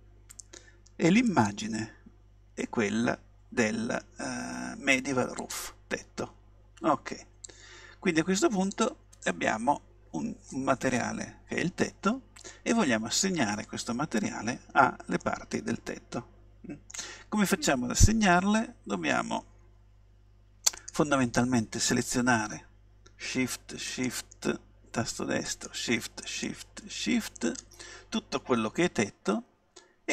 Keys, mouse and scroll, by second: 1.3-3.1 drag, 7.5-10.2 drag, 15.2-17.0 middle drag, 20.8-22.7 right drag, 23.9-29.3 right drag.